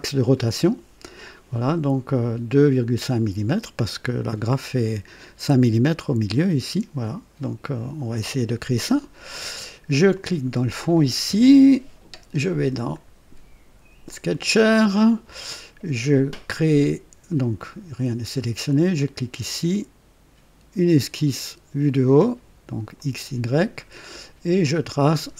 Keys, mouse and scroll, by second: 8.8 click, 10.1 click, 12.9 click, 14.1 click, 17.5 click, 18.7 click, 22.9 click, 25.1 click.